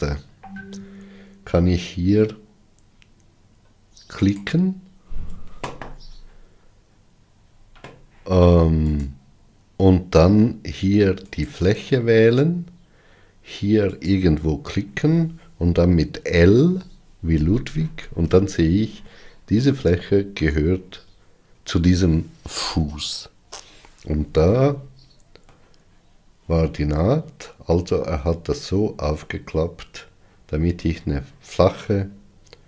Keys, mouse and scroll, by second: 9.2 click, 11.5-14.3 drag, 16.8 l, 24.8-32.6 middle drag.